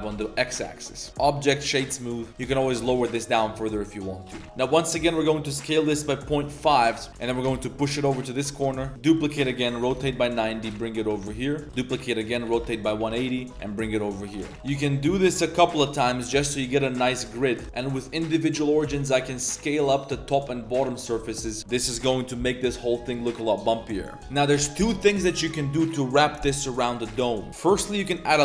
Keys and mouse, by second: 0.7 click, 1.1 Tab, 1.1 a, 1.8 click, 2.1 Tab, 2.2 click, 2.3 g, 2.7 g, 4.3 Tab, 4.4 click, 4.4 Return, 4.4 s, 7.1 g, 8.7 shift+click, 8.9 shift+d, 9.2 r, 10.7 g, 11.6 a, 11.7 shift+d, 12.3 r, 13.5 g, 14.1 a, 14.4 shift+w, 14.5 s, 16.5 click, 17.2 KP_7, 17.5 g, 17.6 click, 17.6 s, 17.9 click, 18.7 s, 21.3 Tab, 21.5 click, 24.2 click, 24.2 shift+s, 27.5 shift+a.